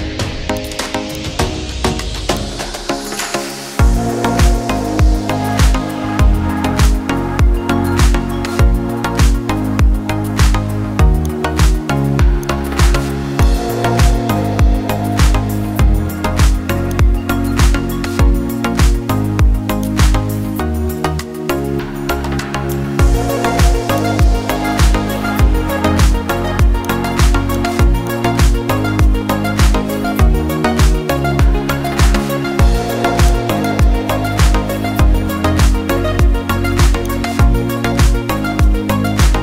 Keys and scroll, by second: 15.9 ], 16.1 ], 16.4 ], 16.6 ].